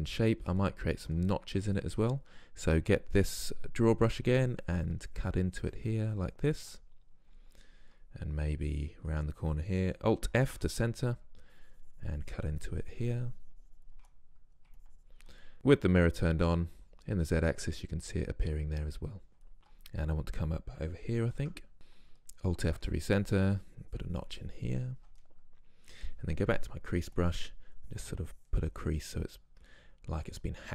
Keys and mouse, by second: 4.4-6.8 drag, 6.8 middle click, 7.5-8.9 middle drag, 10.4 alt+f, 11.6-13.6 drag, 14.9-15.4 drag, 15.4 middle click, 15.8 click, 16.6 click, 17.5 middle click, 21.3 alt+f, 26.5-30.7 drag.